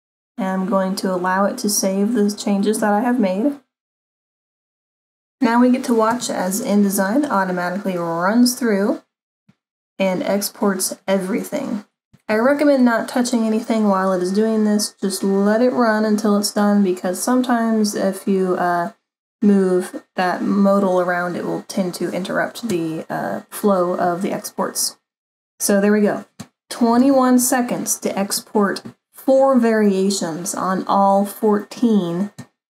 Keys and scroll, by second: 27.0 super+=.